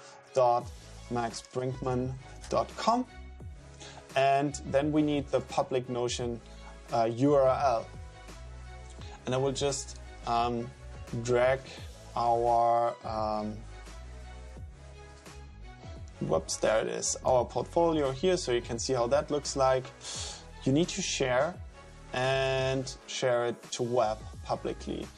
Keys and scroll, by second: 0.0-2.9 typing.